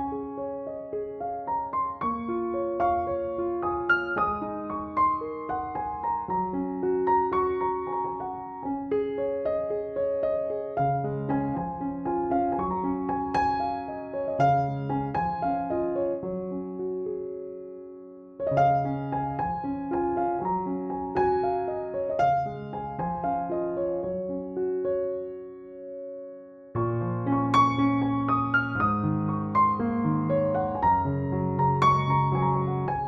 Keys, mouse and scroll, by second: 1.6 ctrl+u, 2.7-4.7 drag, 12.2 click, 13.4 ctrl+l, 14.4 ctrl+l, 15.0 space, 15.4 ctrl+click, 15.9 ctrl+l, 16.9 ctrl+l, 17.4 space, 17.5-18.1 click, 17.8 space, 18.5 ctrl+l, 19.2 space, 19.4 click, 19.6 space, 20.2 ctrl+l, 21.7-23.7 drag, 24.6 space, 24.7 click, 24.9 space, 25.4 ctrl+t, 26.1-27.4 drag, 28.1-28.9 alt+drag, 31.4 space, 32.7 ctrl+t.